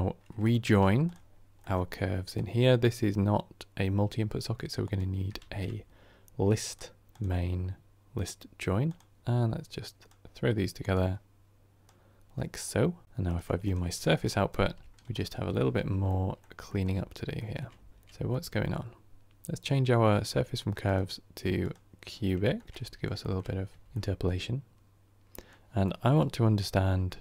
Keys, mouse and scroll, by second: 13.6 shift+click, 15.9-16.8 middle drag, 16.8-17.2 scroll up 2, 17.2-17.6 shift+middle drag, 17.6-17.9 scroll up 2, 17.9-21.6 middle drag, 21.6-22.3 drag, 22.3-23.4 shift+middle drag, 23.4-23.7 scroll up 3, 23.7-27.2 shift+middle drag.